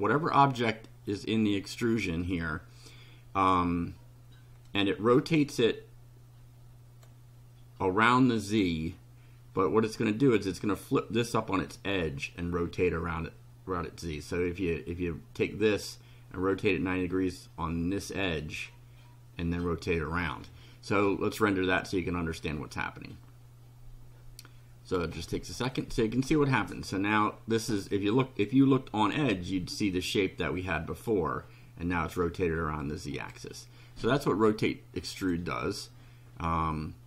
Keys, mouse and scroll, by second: 4.7 click, 21.6 click, 26.7-28.6 drag, 32.4 click, 35.2 click.